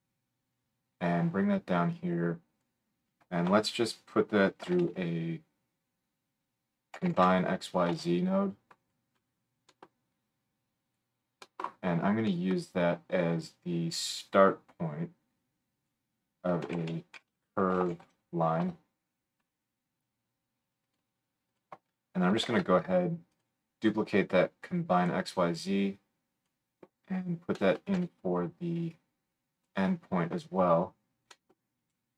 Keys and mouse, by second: 8.9-10.5 middle drag, 10.5-20.9 drag, 20.9-21.5 middle drag, 21.5 click, 21.6-24.2 middle drag, 22.4 shift+d, 24.2-29.7 drag, 27.9 g, 29.7-32.1 middle drag.